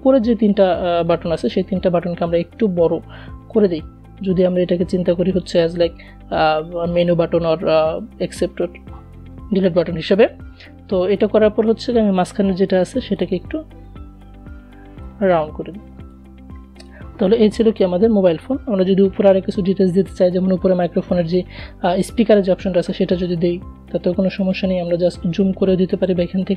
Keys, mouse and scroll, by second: 1.8-9.4 drag, 10.1 a, 11.5-15.2 drag, 22.8 click, 23.3 click, 24.5-25.7 alt+scroll up 1, 25.7-26.5 alt+drag.